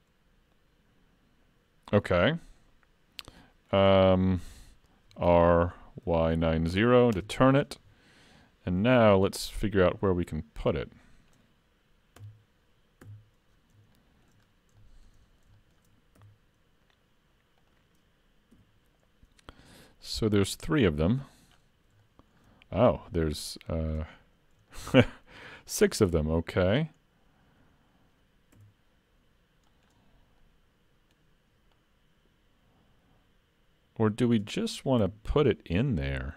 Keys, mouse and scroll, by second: 2.3-3.5 scroll down 4, 2.6 middle click, 3.9 shift+middle click, 5.1 r, 8.4 middle click, 9.7 click, 10.9 click, 12.2 KP_1, 13.1 KP_3, 14.0 shift+middle click, 14.4-14.8 scroll up 3, 14.8 shift+middle click, 15.2-15.5 scroll up 2, 15.6 shift+middle click, 16.2 s, 18.6 g, 21.6-22.0 scroll down 6, 22.0 shift+middle click, 23.4 click, 24.2-24.6 scroll down 2, 24.7 shift+middle click, 25.7 click, 27.0 scroll up 1, 28.6 s, 30.4 middle click, 31.8 click, 35.1 KP_Decimal, 35.7-36.3 scroll down 4, 36.1 middle click.